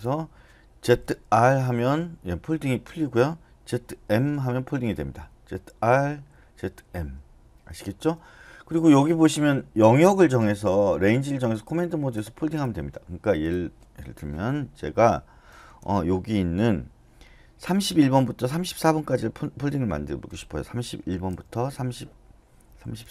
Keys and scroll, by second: 0.8-1.3 typing, 3.7-4.1 typing, 5.3-6.9 typing, 20.5-23.0 typing.